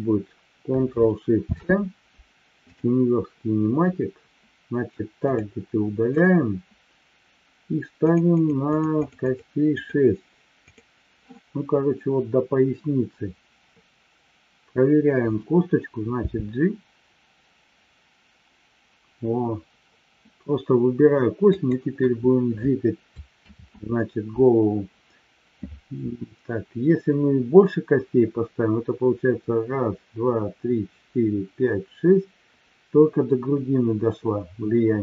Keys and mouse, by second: 1.5 ctrl+shift+c, 5.2 click, 6.1-6.6 drag, 8.6-10.2 drag, 10.6 click, 21.8 click, 23.8 ctrl+z.